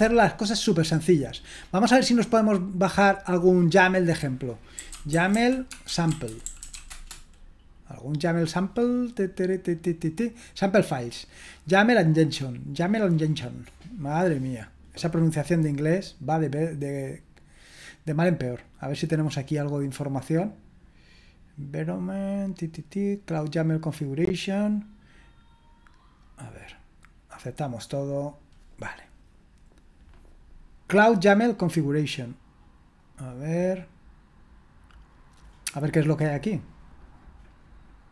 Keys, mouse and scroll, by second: 1.8-4.9 drag, 4.7-7.2 typing, 10.7-33.6 drag.